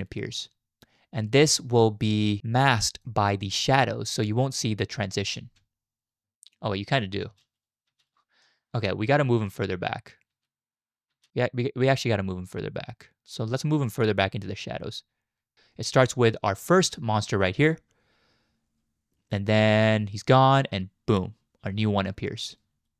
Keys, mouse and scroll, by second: 3.8 click, 5.4 z, 7.0 click, 7.3 space, 7.9 space, 8.4 click, 10.3 space, 11.1 space, 12.6-15.5 drag.